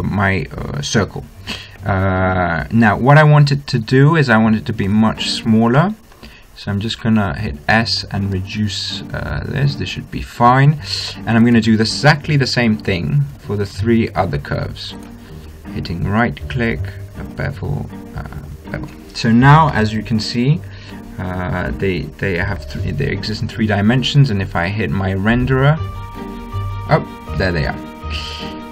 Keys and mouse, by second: 0.5-1.7 middle drag, 4.6 middle click, 5.2-7.0 drag, 6.1 s, 7.0 middle click, 8.7 s, 11.8-12.8 right drag, 13.6-14.6 right drag, 15.4-17.1 right drag, 17.6-19.4 drag, 20.1-22.1 middle drag, 24.9-26.6 middle drag.